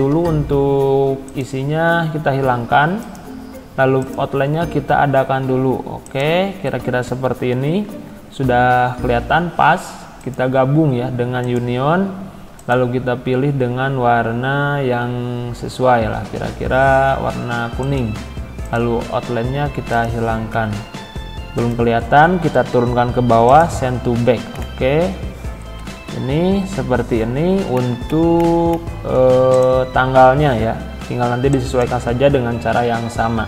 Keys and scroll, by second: 26.0 Down.